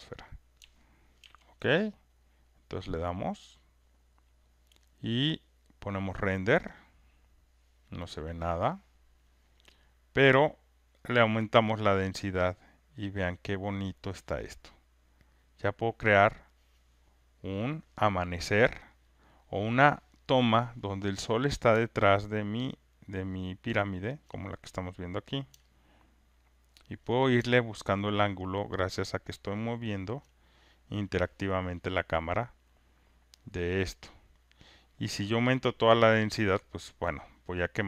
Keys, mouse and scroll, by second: 0.0 click, 1.1 ctrl+F1, 2.2 click, 3.4 click, 6.0 click, 8.1-13.4 drag, 15.3-18.2 drag, 18.7-20.5 drag, 24.2-25.4 alt+drag, 26.9 alt+click, 30.1 alt+click, 33.7-35.2 alt+drag, 37.1-37.8 drag.